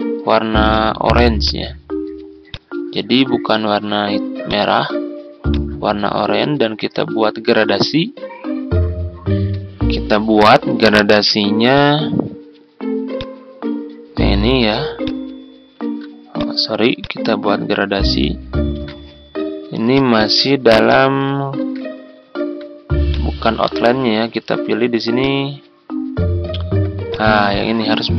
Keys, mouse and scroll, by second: 15.8 ctrl+z, 16.3 click, 18.7 ctrl+z, 19.8 click, 21.6 ctrl+z, 22.3 ctrl+scroll up 1, 23.0-28.1 drag.